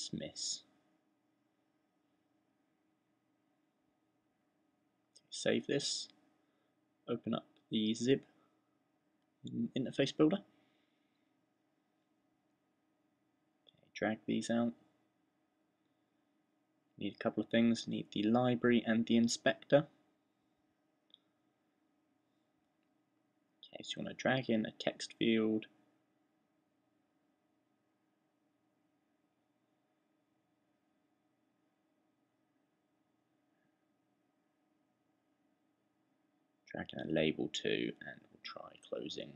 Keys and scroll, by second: 0.0-2.3 typing, 3.5-4.2 typing, 36.5-39.3 typing.